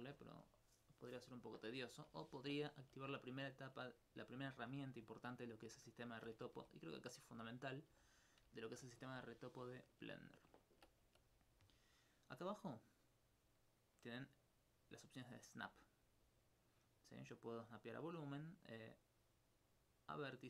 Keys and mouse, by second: 2.5 alt+click, 4.4 alt+click, 5.4 alt+click, 7.7 click, 9.5 click, 9.9 alt+click, 10.4 alt+click, 10.7 ctrl+alt+click, 11.1 click.